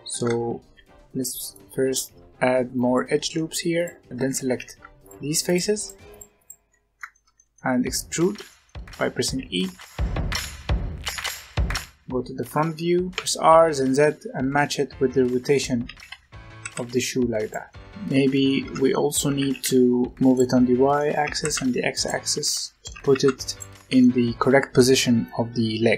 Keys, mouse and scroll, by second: 0.5 ctrl+r, 2.8 middle click, 3.7 alt+click, 4.1 ctrl+z, 4.4 ctrl+z, 4.9 shift+click, 5.4 shift+click, 5.7 shift+click, 6.0 shift+click, 6.3 shift+click, 6.6-7.8 middle drag, 7.8-8.4 scroll up 1, 8.4 middle click, 9.2 e, 10.1 middle click, 10.4 Tab, 10.6 scroll down 1, 10.6-11.7 middle drag, 11.7 scroll down 1, 11.9-13.0 scroll up 1, 13.0 r, 15.8 g, 17.6 middle click, 18.6 Tab, 18.8-19.3 middle drag, 19.3 g, 20.2 middle click, 20.6-21.1 middle drag, 21.1 g, 21.9-22.9 middle drag, 22.9 g, 23.5-25.9 middle drag.